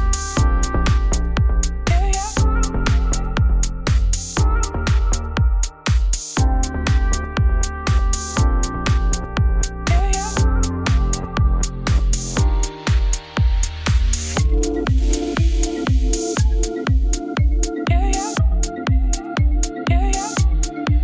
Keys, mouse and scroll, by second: 0.3 g, 1.9 click, 2.0 g, 2.5 scroll down 3, 2.9-4.1 scroll up 1, 5.2 right click, 5.5 ctrl+f, 8.4 ctrl+f, 9.1 ctrl+f, 10.0 click, 10.7-11.9 drag, 12.9 scroll up 3, 13.0 shift+middle click, 13.7 scroll down 2, 14.0 ctrl+b, 15.3 ctrl+z.